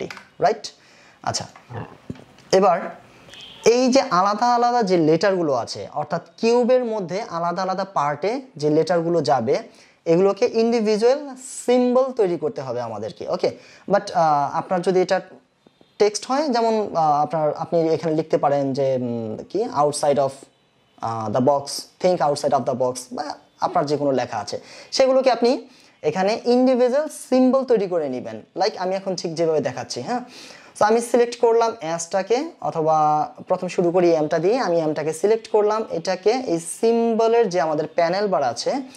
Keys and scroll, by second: 0.0 Return.